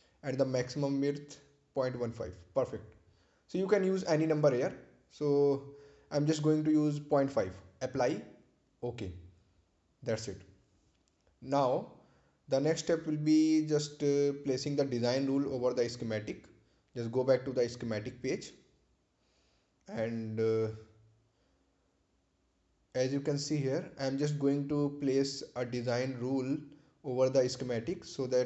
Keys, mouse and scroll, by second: 0.1-1.3 typing, 1.8 Return, 3.1 click, 4.5-5.9 typing, 8.2 BackSpace, 12.2 click, 21.0 click, 27.6 click.